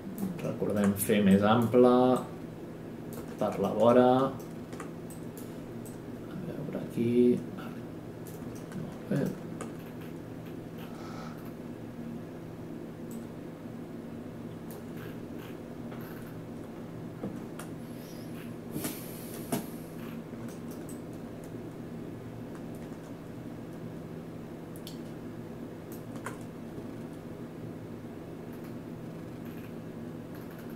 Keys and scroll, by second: 18.7 space, 26.7 space.